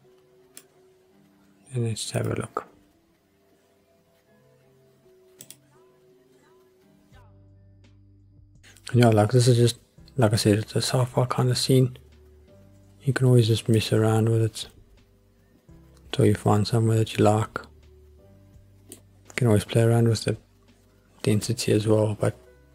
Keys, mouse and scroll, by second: 0.0 click, 2.5 click, 5.4 click, 13.8-18.9 middle drag.